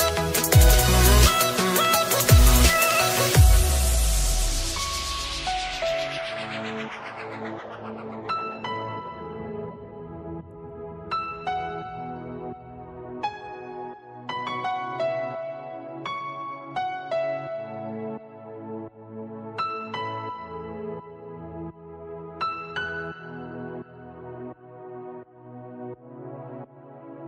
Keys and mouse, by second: 0.9 click, 2.5 click, 5.6 click, 8.9 click, 9.0 click, 11.1 click, 13.2 click, 13.3 click, 14.7 click, 16.4 click, 19.5 ctrl+z, 21.5 click, 23.2 click, 26.7 click.